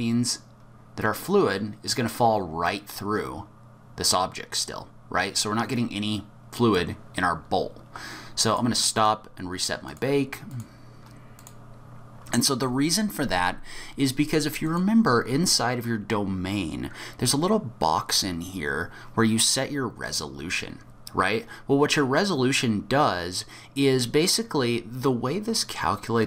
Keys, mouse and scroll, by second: 8.5 click, 9.0 click, 9.8 click, 11.4 click, 14.6 click.